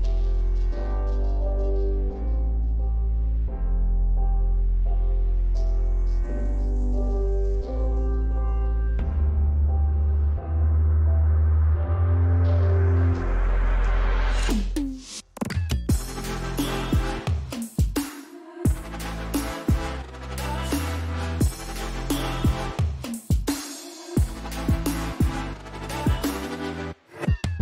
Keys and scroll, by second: 2.8 BackSpace, 3.1 c, 3.6 BackSpace, 3.9 c, 6.8 BackSpace, 8.0-9.9 typing, 21.1-23.0 typing.